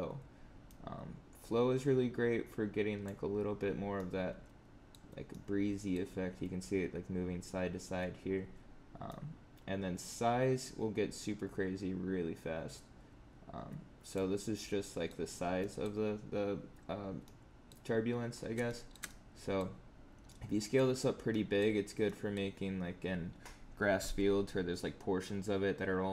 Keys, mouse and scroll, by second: 14.8 middle click, 15.2-15.5 scroll down 3, 15.5 middle click, 17.1 middle click, 18.3 scroll up 4, 18.6 shift+middle click, 19.0 middle click, 20.3 middle click, 21.3 middle click, 21.7 scroll down 4, 22.0 middle click.